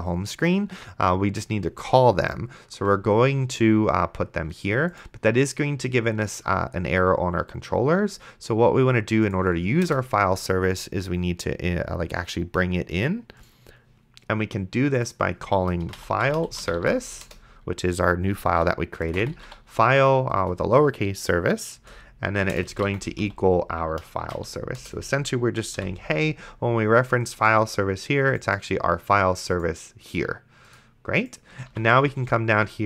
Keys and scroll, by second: 10.1 Return, 15.7-17.6 typing, 19.0-20.0 typing, 20.4 Return, 21.8-24.5 typing, 24.8 Return, 25.8 ;, 31.9 ctrl+s.